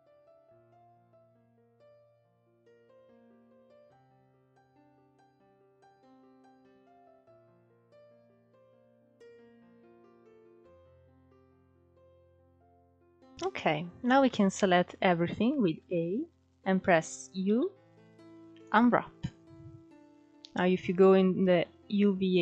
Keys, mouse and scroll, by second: 0.8 alt+shift+click, 1.4 alt+shift+click, 2.1-4.9 middle drag, 4.9 alt+shift+click, 5.3-6.6 shift+middle drag, 6.6 scroll down 3, 6.7-7.8 middle drag, 7.8-8.3 scroll up 1, 8.3 ctrl+e, 9.2 click, 9.6-10.0 scroll down 3, 10.0 click, 10.3-13.4 middle drag, 13.4-13.9 scroll up 3, 13.9-15.4 shift+middle drag, 15.4 a, 17.0 u.